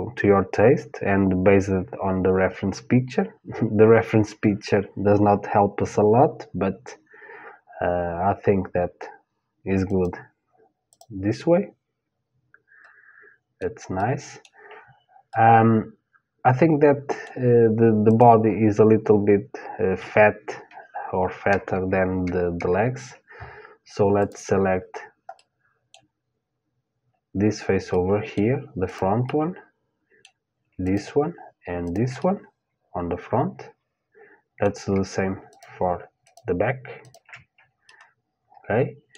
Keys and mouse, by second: 10.5-12.5 drag, 11.0 middle click, 11.6-13.0 middle drag, 13.6-16.9 middle drag, 17.7-20.4 drag, 23.8-25.8 drag, 25.8-27.0 middle drag, 27.5-30.9 middle drag, 28.4-33.6 drag, 31.8 middle click, 32.7-33.8 middle drag, 35.1-38.7 drag, 37.5 middle click, 38.7 middle click.